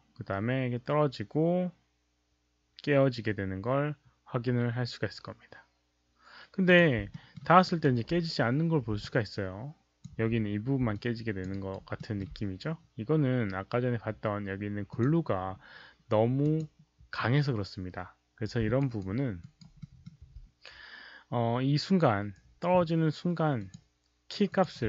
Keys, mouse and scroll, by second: 3.3 alt+click, 3.3 alt+middle click, 3.6 alt+click, 3.6 alt+middle click, 3.6 alt+right click, 6.7 click, 7.1 alt+middle click, 7.6 alt+right click, 9.0-10.0 alt+drag, 10.9 alt+click, 11.4 alt+right click, 11.9 alt+middle click, 14.8 alt+click, 14.8 alt+middle click, 16.4 alt+click, 18.7 alt+right click, 19.3 alt+right click, 19.7 alt+middle click, 23.5 click, 24.4 click.